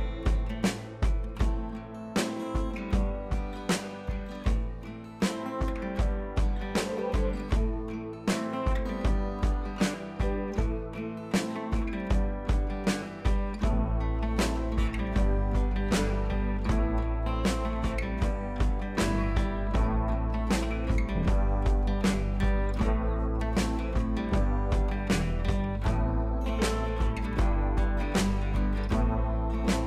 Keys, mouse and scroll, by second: 1.7 scroll down 1, 6.2-7.8 drag, 8.2 scroll up 1, 8.3 t, 9.1-10.3 alt+drag, 10.3-10.7 scroll down 1, 10.7 click, 13.3 scroll down 1, 14.0 ctrl+z, 14.8 click, 21.5 scroll down 1, 24.1-26.3 scroll down 1, 28.2 scroll down 1.